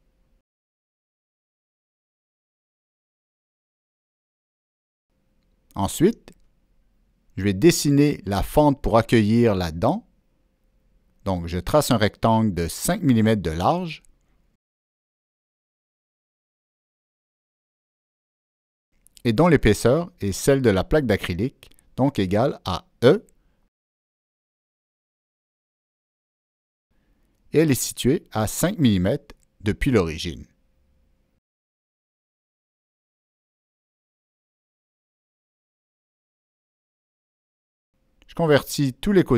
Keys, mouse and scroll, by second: 2.2 Return, 5.0 click, 6.9 ctrl+middle click, 7.0 click, 8.1 right click, 9.7 click, 10.5 click, 11.5 Escape, 11.5 click, 11.5 right click, 12.1 click, 13.5 ctrl+click, 14.7 Escape, 14.7 ctrl+click, 14.8 Escape, 15.4 right click, 16.2 click, 16.8 click, 18.1 Return, 20.5 click, 21.2 click, 21.5 Return, 23.1 Down, 23.1 click, 24.1 Down, 24.1 Return, 24.1 click, 24.9 Down, 24.9 Return, 24.9 click, 26.3 click, 27.5 Return, 28.6 click, 30.1 click, 31.0 click, 32.2 Return, 32.2 click, 33.0 Return, 33.0 click, 33.5 Escape, 34.5 ctrl+middle click, 34.6 Escape, 34.6 Return, 34.6 click, 37.0 right drag, 37.1 Escape, 37.1 ctrl+middle click, 37.9 ctrl+middle click, 37.9 right click, 39.0 click.